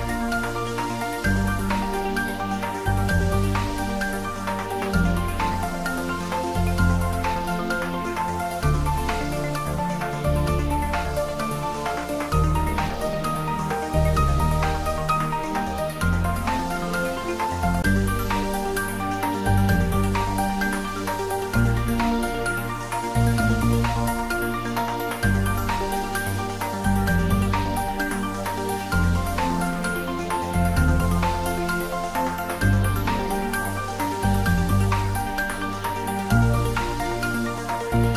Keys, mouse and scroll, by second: 0.0 shift+click, 4.2-4.5 scroll down 1, 6.0-9.5 middle drag, 9.5 click, 10.0-14.9 right drag, 16.6-21.1 drag, 21.9-26.6 drag, 26.8-34.5 drag.